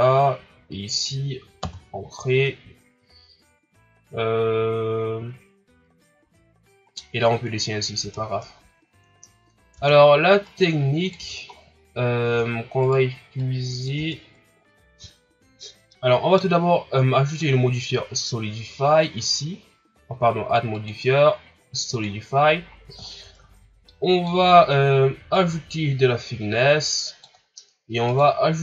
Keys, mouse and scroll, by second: 6.8 right click, 7.5 scroll down 1, 8.0 Tab, 8.4-8.9 scroll down 1, 8.9-9.5 scroll up 3, 9.7 Tab, 10.4 right click, 11.1 Tab, 11.5-12.0 scroll down 2, 12.0 scroll up 1, 12.2 Tab, 12.8 right click, 13.4 click, 13.9 Tab, 14.3 scroll down 4, 15.1 shift+scroll up 1, 15.9-17.2 middle drag, 19.7-20.3 drag, 22.0-22.6 drag, 22.6-23.0 scroll up 3, 23.0-23.5 shift+scroll down 5, 23.9-25.3 middle drag, 25.3-28.6 drag.